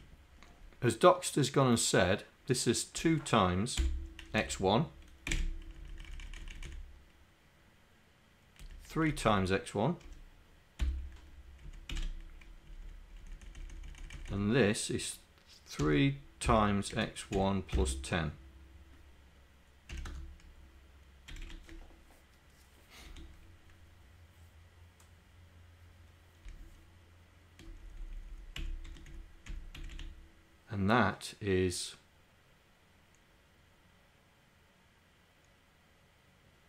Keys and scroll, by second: 3.0 2, 3.8 KP_Multiply, 4.4 Down, 5.4 1, 5.7 Down, 6.2 Right, 6.6 Right, 9.0 Right, 10.9 KP_Multiply, 11.6 Right, 11.9 Delete, 12.5 Right, 13.1 Right, 13.5 Right, 14.3 Right, 15.8 3, 17.0 x, 17.4 1, 19.9 KP_1, 21.3 Delete, 23.0 End, 26.5 Down, 27.8 Down, 28.2 Down, 28.6 Delete, 28.9 End, 29.2 Left, 29.5 Down, 29.8 Delete.